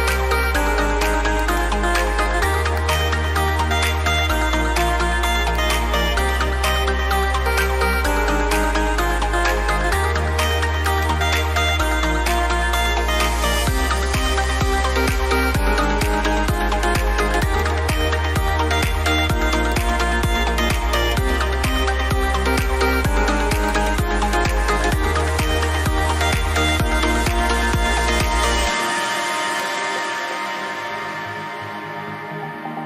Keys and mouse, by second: 0.3 right click, 1.4 click, 10.8 click, 29.5 click.